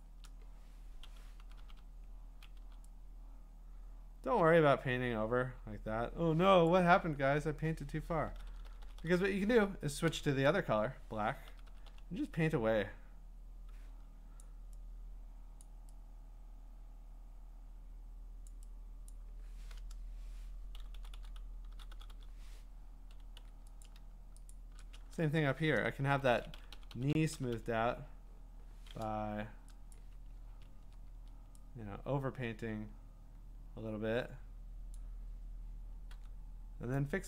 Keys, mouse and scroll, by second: 0.0 alt+click, 4.2 ], 6.7 click, 8.3-10.1 typing, 8.5-9.8 drag, 11.5 ], 11.7 ], 11.9 ], 14.4 click, 15.6 click, 18.5 click, 19.1 click, 20.7-22.1 typing, 23.4 x, 23.9 click, 24.5 shift+click, 26.1 ], 26.2 ], 26.4 ], 29.9 click, 32.6-34.3 drag, 34.9-37.2 drag, 36.1 x.